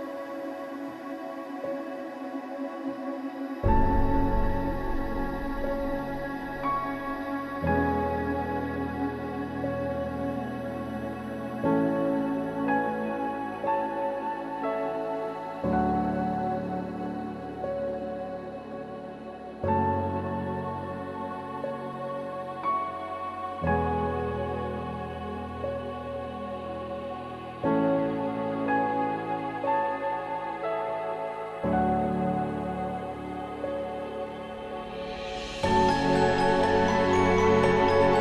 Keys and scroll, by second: 0.7 alt+Delete, 2.0 ctrl+d, 9.0 ctrl+s.